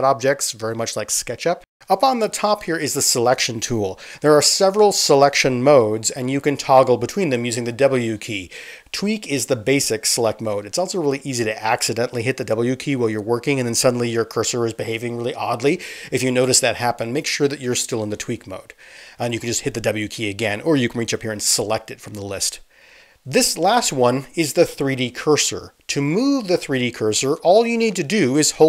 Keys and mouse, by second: 0.6-5.7 middle drag, 2.2 ctrl+z, 5.7-15.5 drag, 8.2-11.2 typing, 15.5-17.5 middle drag, 17.5-28.6 drag.